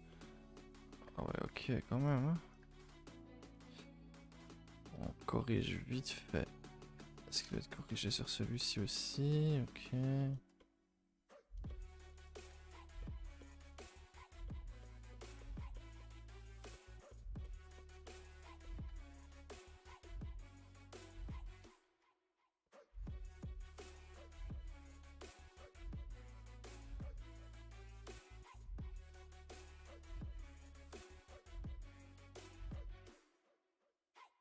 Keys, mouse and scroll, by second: 0.1 middle click, 1.0 g, 2.6 click, 3.7-7.0 middle drag, 7.0 g, 7.5-12.2 shift+middle drag, 12.2 click, 12.5 g, 13.0-18.3 middle drag, 18.3 scroll up 2, 18.6 middle click, 18.9 a, 19.4 2, 19.7 alt+Left, 19.9 middle click, 20.3 s, 24.9 r, 25.7 3, 26.2 alt+click, 26.7 x, 27.0 scroll up 2, 27.2 1, 27.4 middle click, 27.7-28.1 scroll up 1, 28.1 click, 28.1 g, 29.2 click, 29.5 scroll down 1, 29.7 g, 30.5 click, 30.6 g, 31.0 middle click, 31.2 a, 31.3 a, 31.6 middle click, 32.2 scroll down 1, 32.4 scroll up 1, 32.4-33.7 middle drag, 33.7 scroll up 2, 33.8-34.4 middle drag.